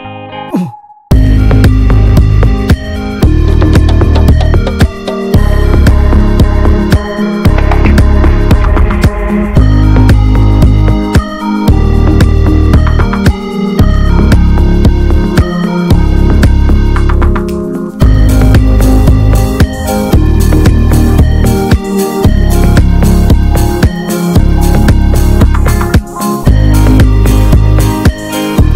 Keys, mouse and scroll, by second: 0.2 ctrl+r, 0.9 s, 3.1 click, 3.9 s, 4.9 alt+z, 5.1 alt+z, 5.3 Tab, 5.4 click, 5.6 alt+z, 5.8 alt+middle click, 6.1 alt+middle click, 6.3 click, 6.5 ctrl+a, 6.7 alt+middle click, 7.0 Tab, 7.1 alt+z, 7.5 click, 7.9 shift+middle click, 8.0 scroll up 1, 8.2 s, 9.1 s, 10.7 shift+middle click, 11.5 s, 12.6 s, 13.8 click, 14.2 shift+middle click, 14.6 s, 15.6 click, 16.3 s, 17.2 click, 18.0 s, 19.8 click, 20.4 s, 21.4 alt+middle click, 21.6 alt+z, 21.8 Tab, 22.2 ctrl+s, 22.4 Tab, 22.8 3, 23.1-24.4 drag, 24.4 ctrl+s, 26.7 s, 28.3 alt+middle click, 28.5 alt+z.